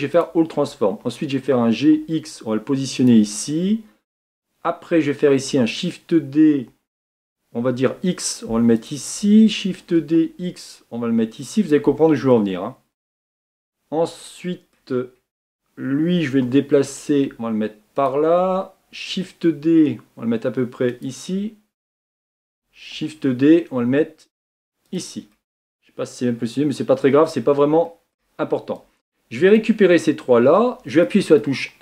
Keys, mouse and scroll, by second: 1.2 g, 5.3 shift+d, 10.1 shift+d, 12.4-15.0 shift+middle drag, 15.0-16.0 scroll up 4, 16.7 g, 19.3 shift+d, 22.9 shift+d, 25.4-27.4 middle drag, 27.4-27.9 scroll down 5, 27.9-28.8 shift+middle drag, 28.8-30.9 drag.